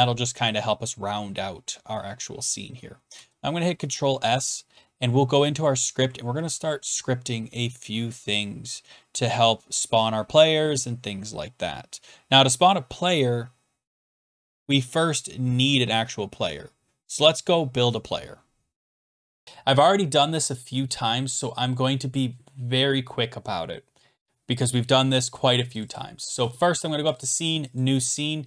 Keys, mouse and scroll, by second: 1.8 typing, 3.1 ctrl+s, 5.4 click, 19.4 click, 22.2 click, 24.4 scroll down 3, 25.3 click, 25.8 click, 25.9 click, 27.2 click.